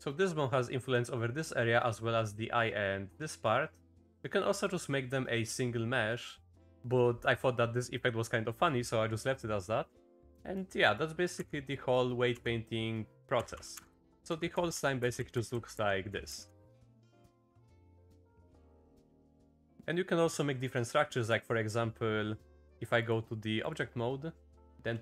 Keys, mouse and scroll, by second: 1.7 click, 6.6 click, 7.8 click, 10.3 Down, 10.3 click, 10.8 click, 11.3 Down, 11.7 click, 13.7 Up, 13.9 Up, 14.1 Down, 14.7 Down, 15.0 Up, 15.2 Up, 15.5 Up, 15.7 Up, 16.1 Down, 16.9 Down, 17.1 Down, 17.3 Up, 17.5 Up, 18.0 Up, 18.2 Up, 19.2 click, 20.7 click, 22.8 right click, 23.1 right click.